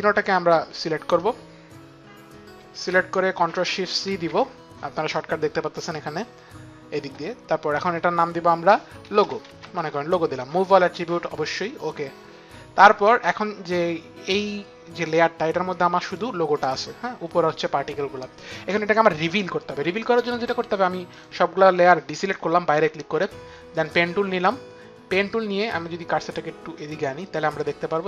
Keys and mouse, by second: 0.5 shift+click, 3.7 ctrl+shift+c, 3.7 click, 8.5-9.7 typing, 11.4 click, 14.6 click, 15.7 click, 16.1 click, 20.7 click, 23.3 click, 25.7 click, 27.1 click.